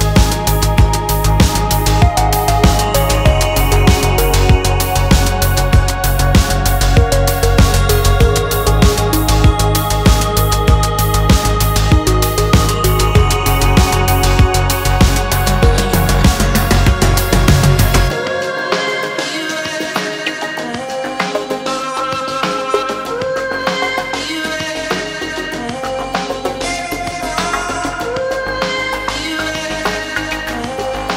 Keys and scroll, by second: 2.4 ctrl+d, 2.8 ctrl+space, 13.2 ctrl+d, 26.0 ctrl+space.